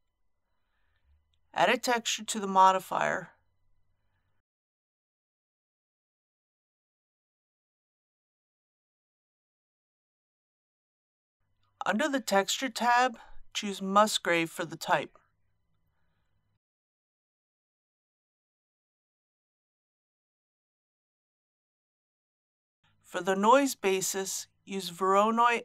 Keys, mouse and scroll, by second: 6.3-7.3 typing, 7.4 Return, 13.3-18.7 drag.